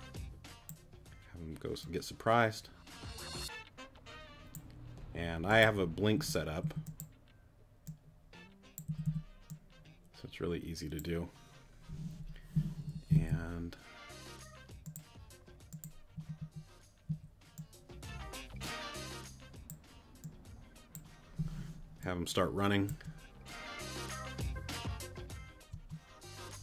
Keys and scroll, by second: 6.1 Right, 8.9 Right, 13.1 Left, 16.1 Right, 22.9 space, 25.7 space.